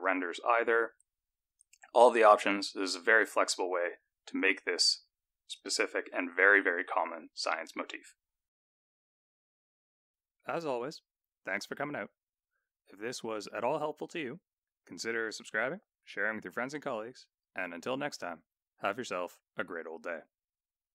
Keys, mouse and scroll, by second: 0.2 click, 2.0 click, 2.9 click, 3.7 click, 5.0 click, 6.2 click.